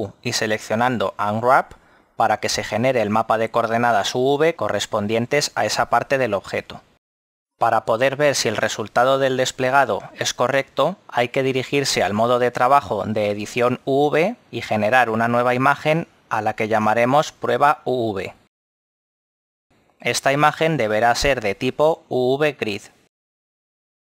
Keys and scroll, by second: 0.5 u.